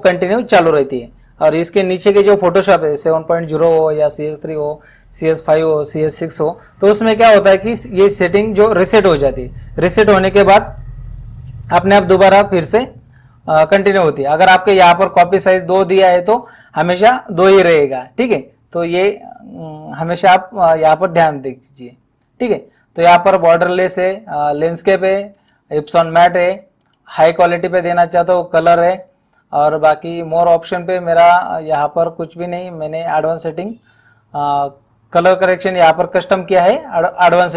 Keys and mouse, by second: 25.3 click, 30.1 click, 37.1 click.